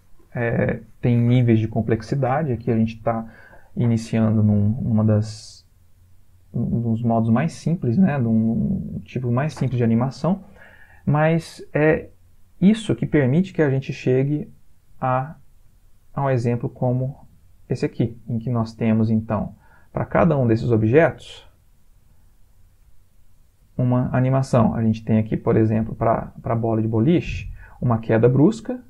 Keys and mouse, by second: 8.9 Escape, 14.1 click.